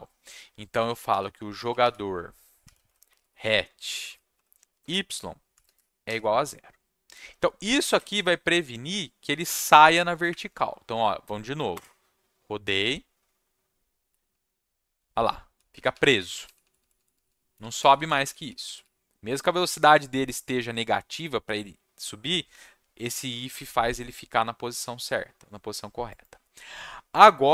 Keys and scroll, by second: 0.4-6.5 typing, 7.8 ctrl+shift+s, 10.3 Up, 11.7 Return, 14.3 w, 15.7-18.8 typing, 27.3-27.5 typing.